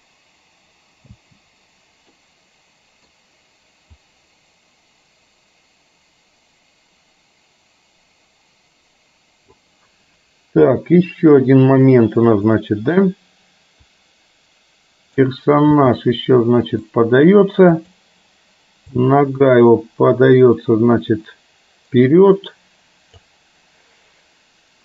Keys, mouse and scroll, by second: 1.7 space, 2.2-3.2 middle drag, 4.0-9.6 drag, 10.6 KP_3, 12.2 click, 13.9-15.4 drag, 15.7 g, 17.9 click, 19.1-23.4 drag.